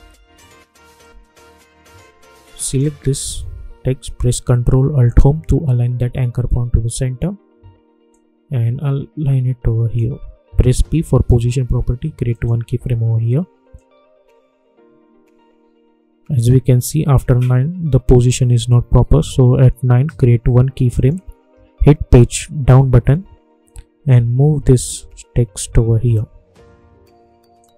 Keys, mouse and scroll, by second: 0.2 =, 0.9-2.6 drag, 5.0 ctrl+alt+Home, 7.0-7.3 alt+scroll up 1, 8.0-11.1 drag, 11.1 p, 12.3-20.9 drag, 22.5 Page_Down, 24.1 Left, 27.5 click.